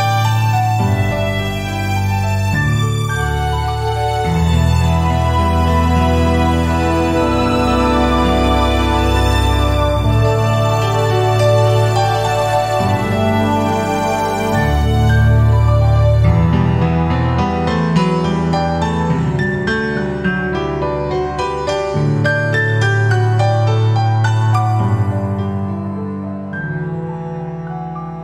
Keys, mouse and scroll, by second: 2.9 typing, 12.4 click, 12.4 typing, 13.3-21.7 right drag, 13.6-14.0 typing, 19.0 typing, 21.2 typing, 21.7 scroll down 1, 22.0-24.7 right drag, 23.0 typing.